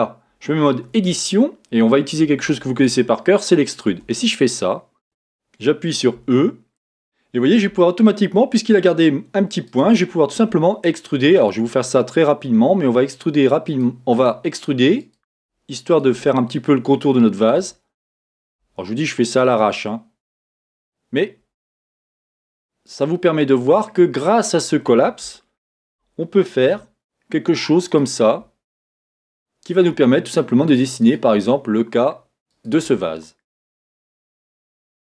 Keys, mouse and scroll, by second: 5.0 Tab, 6.2 e, 25.3-28.7 shift+middle drag, 26.6 e.